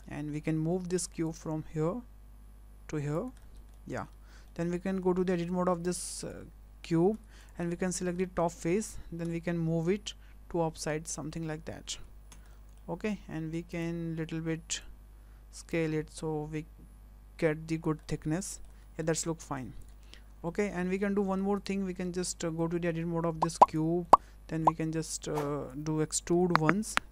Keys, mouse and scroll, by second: 0.0 middle click, 0.7 w, 1.2 click, 3.4 shift+middle click, 3.7 middle click, 4.1 Tab, 4.4-4.9 scroll up 3, 4.4 middle click, 5.0 shift+middle click, 5.7 2, 6.2 click, 7.1 3, 7.4 click, 7.6 scroll down 4, 7.9 shift+middle click, 8.2 middle click, 9.3 w, 9.8 click, 12.3 Tab, 12.5 middle click, 13.7 click, 14.8 click, 18.0 middle click, 18.8 scroll up 3, 19.0 shift+middle click, 19.2 scroll down 2, 19.4 middle click, 19.8 click, 20.2-20.5 scroll down 2, 20.5 middle click, 20.8 middle click, 21.2 shift+middle click, 21.6 click, 21.8 Tab, 22.6 middle click, 23.6 click, 24.1 middle click, 24.6 click, 26.3 e.